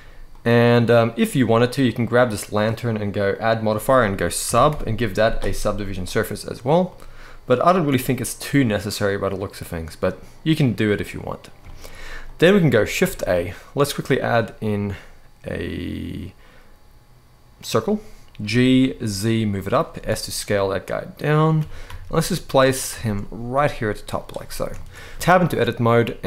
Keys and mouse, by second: 0.0-0.9 middle drag, 1.5 click, 3.1-5.9 drag, 6.6-7.5 middle drag, 8.5-10.6 middle drag, 11.4 shift+middle click, 11.9-12.2 middle drag, 12.7 shift+a, 18.1 g, 18.5 z, 19.6 s, 21.3 g, 21.5 z, 22.7 shift+middle click, 23.2 s, 23.8 click, 24.1 middle click, 24.5 shift+middle drag, 25.0 Tab.